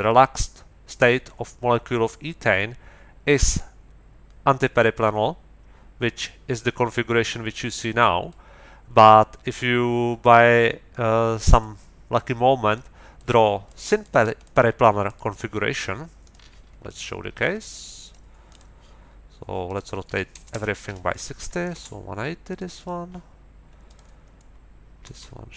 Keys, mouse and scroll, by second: 10.2-11.8 middle drag, 12.7 middle click, 13.6 middle click, 14.4 middle click, 15.0 middle click, 16.2 middle click, 16.8 click, 17.7 click, 18.4 click, 19.6 click, 20.1 Right, 20.3 BackSpace, 21.2 KP_1, 21.4 KP_8, 21.7 Return, 22.5-23.0 scroll up 2, 23.8 click, 25.0 Left.